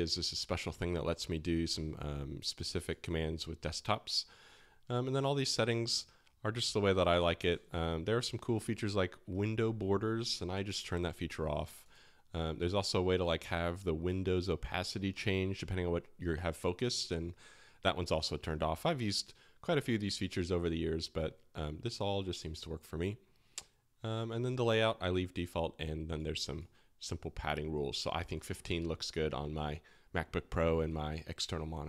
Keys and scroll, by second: 6.6 typing.